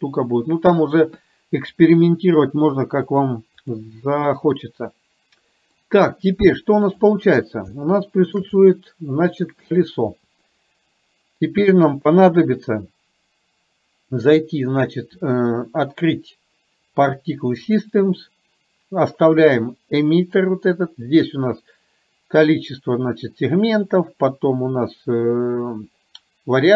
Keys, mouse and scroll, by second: 3.2-3.8 drag, 4.4-5.9 middle drag, 7.8 shift+middle click, 8.7 middle click, 14.3 click.